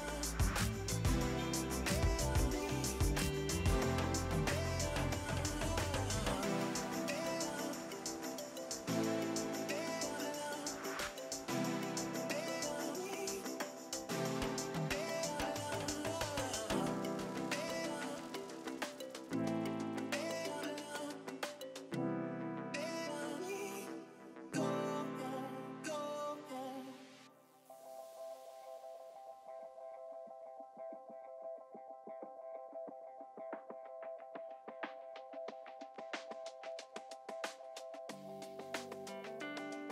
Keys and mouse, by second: 0.0 click, 1.8 ctrl+shift+a, 1.9 click, 2.5 KP_1, 4.9 Return, 5.3 KP_5, 5.4 Return, 5.9 click, 6.9 click, 7.9 click, 8.8 KP_5, 9.2 click, 9.8 click, 9.9 KP_0, 10.1 click, 10.2 click, 10.4 ctrl+shift+a, 10.5 click, 10.6 KP_5, 10.8 click, 10.8 ctrl+shift+a, 11.0 KP_0, 11.1 ctrl+1, 11.5 click, 11.7 click, 12.0 Escape, 12.4 click, 12.8 click, 12.9-15.7 typing, 12.9 ctrl+1, 13.0 click, 13.4 click, 13.4 ctrl+shift+a, 13.6 Return, 13.8 click, 14.0 click, 14.2 click, 14.3 ctrl+shift+a, 14.4 click, 14.6 click, 14.7 ctrl+shift+a, 14.9 ctrl+1, 15.1 click, 15.1 ctrl+shift+a, 15.3 ctrl+1, 15.4 click, 15.5 click, 15.8 click, 15.9 ctrl+shift+a, 16.0 Return, 16.2 click, 16.4 Return, 16.5 click, 16.7-19.2 typing, 16.9 click, 17.3 click, 17.9 ctrl+1, 18.0 click, 18.4 click, 18.5 click, 18.6 ctrl+1, 18.7 click, 19.0 click, 19.9 click, 25.5 click, 29.3 ctrl+shift+x, 29.4 click, 30.0 KP_1, 30.3 Return, 30.6 alt+y, 30.9 click, 33.4 shift+click, 33.9 Delete, 34.8 click, 35.2 shift+click, 35.4 Delete, 36.3 click, 36.7 ctrl+shift+x, 37.1 click, 37.7 KP_1, 37.9 Return, 38.5 click.